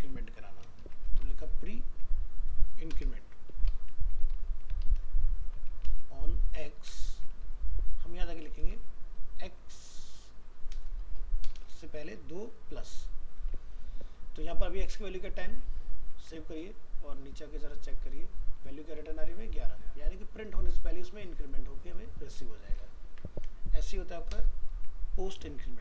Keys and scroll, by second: 12.9 ctrl+s, 23.1 ctrl+c, 24.8 ctrl+v.